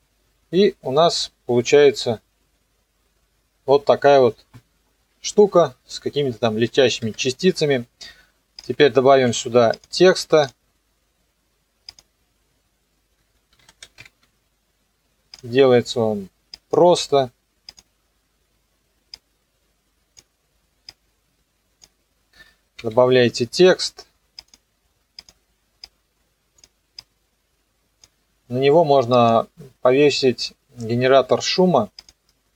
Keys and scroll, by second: 5.3 KP_0, 9.1 ctrl+s, 13.3-14.5 typing, 22.8 p.